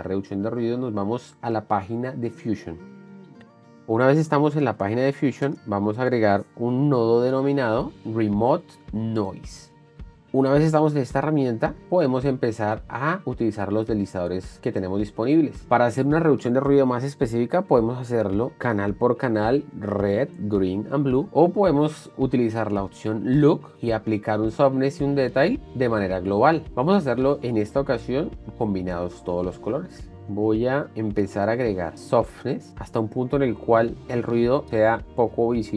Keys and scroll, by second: 3.3 shift+5, 6.1 shift+space, 6.8 n, 7.3 o.